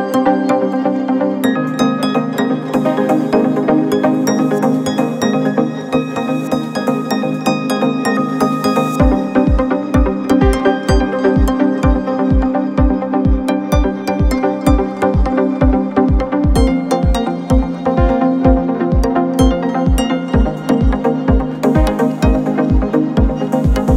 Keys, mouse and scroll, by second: 0.1 click, 2.5 x, 4.4-6.0 middle drag, 6.0 click, 8.1 x, 10.0-11.7 middle drag, 11.7 Tab, 13.9 shift+a, 17.5-23.4 middle drag, 23.4 ctrl+alt+KP_0.